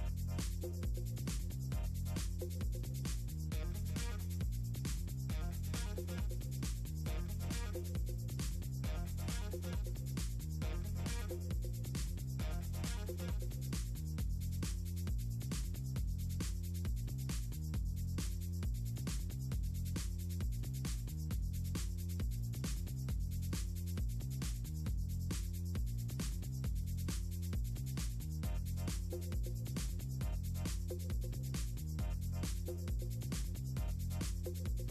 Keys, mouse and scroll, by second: 0.1 scroll down 2, 2.1-2.5 scroll down 4, 3.3 scroll down 2, 4.6 scroll down 2, 5.2-5.7 scroll down 4, 6.1 scroll down 2, 7.2 scroll down 2, 7.7-8.3 scroll up 4, 8.9 scroll down 2, 10.1 right click, 10.4-10.9 scroll down 4, 11.9 space, 12.0 a, 13.6-14.5 scroll down 6, 14.8 scroll up 2, 15.3 scroll down 2, 15.9 click, 16.0 space, 19.0-19.6 scroll down 4, 21.9 click, 22.4 click, 23.5 click, 24.9 click, 25.1 click, 25.5 click, 26.3 click, 26.7 click, 26.9 click, 27.3 click, 28.3 click, 29.7 click, 31.6 click, 32.3 click, 32.5 click, 33.7 click.